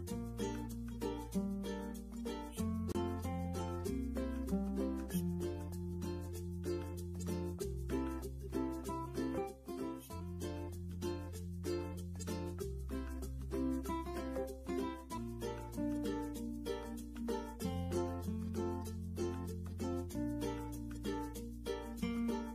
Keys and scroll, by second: 16.9 ctrl+a, 17.6 4, 18.1 8, 18.5 0, 20.3 Return.